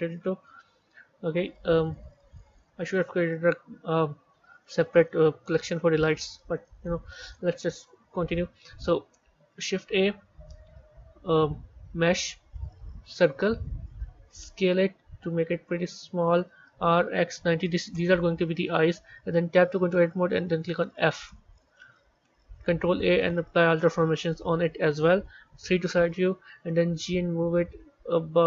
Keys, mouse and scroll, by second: 0.4-3.4 scroll down 1, 4.4-4.9 scroll up 1, 4.9-5.7 middle drag, 5.7-6.3 scroll down 2, 6.3 z, 7.6-8.4 scroll down 4, 9.5 shift+a, 13.6-14.4 scroll up 4, 14.4 s, 16.5 r, 19.4 b, 21.5 Tab, 22.6 ctrl+a, 25.3 KP_3, 26.5 g.